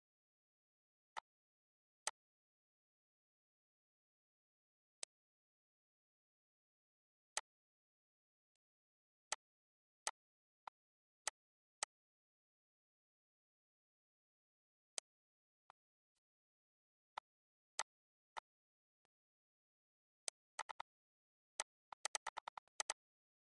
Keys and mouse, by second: 1.1 click, 2.0 click, 5.0 click, 7.3 click, 8.5 click, 9.3 shift+click, 10.0 shift+click, 11.2 shift+click, 11.8 shift+click, 14.9 click, 15.6 click, 17.1 click, 17.7 click, 19.0 click, 20.2 click, 21.5 click.